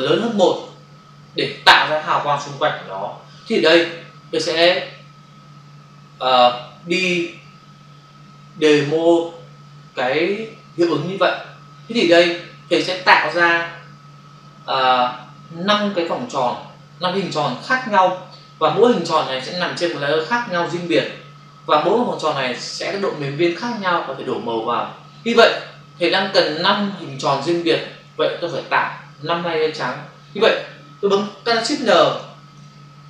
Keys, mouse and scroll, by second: 32.0 ctrl+shift+n.